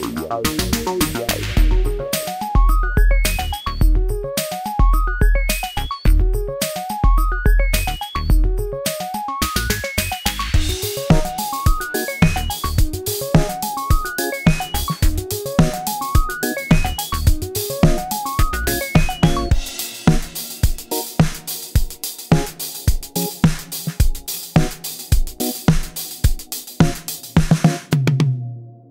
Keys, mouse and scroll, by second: 0.4-1.2 scroll down 1, 1.2 click, 8.4 click.